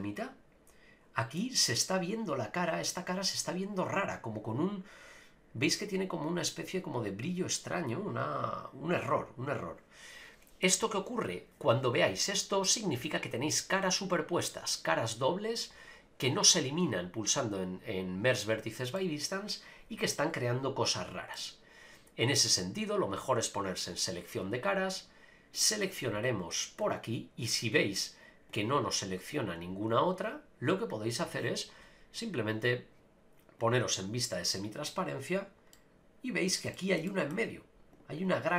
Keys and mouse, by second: 3.4-10.7 middle drag, 19.0-21.3 middle drag, 24.1 click, 25.5 click, 27.9 click, 29.3 click, 29.9 click, 33.6 click, 35.7 middle click, 36.7 shift+middle click, 37.1 middle click.